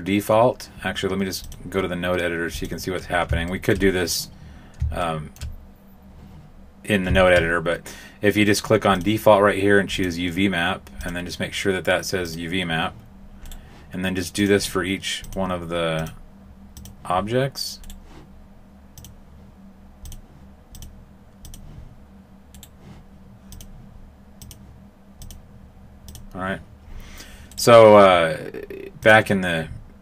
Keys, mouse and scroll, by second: 1.4 click, 3.4 shift+middle click, 5.3 shift+middle click, 8.9 click, 10.9 click, 13.4 right click, 14.3 click, 15.9 click, 17.8 right click, 18.9 click, 20.7 click, 22.5 right click, 23.5 click, 25.2 click, 27.5 right click, 29.0 click.